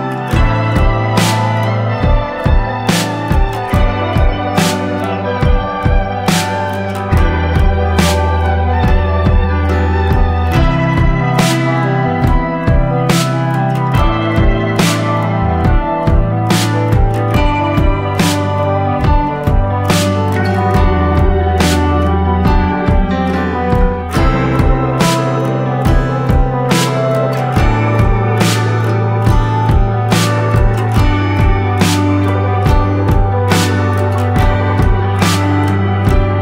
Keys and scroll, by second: 1.1-4.9 typing, 18.3 F8, 19.1-21.5 typing, 22.8-27.3 typing.